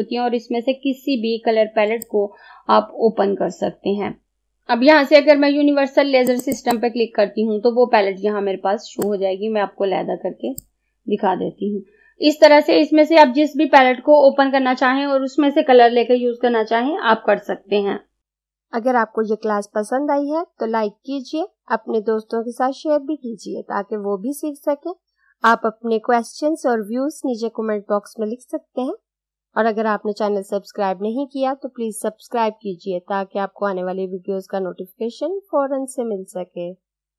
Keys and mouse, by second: 2.1-4.3 drag, 6.3 click, 9.4-18.2 drag.